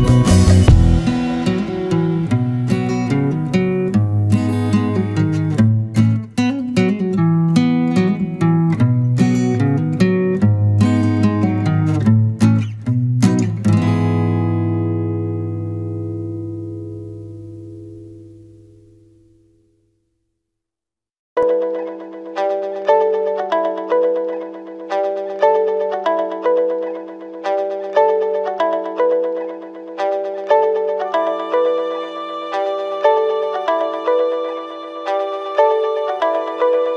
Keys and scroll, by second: 6.0 ctrl+z, 12.4 ctrl+=, 13.6 ctrl+z, 27.0 ctrl+z, 33.1 ctrl+-, 34.9 ctrl+0, 36.0 ctrl+z.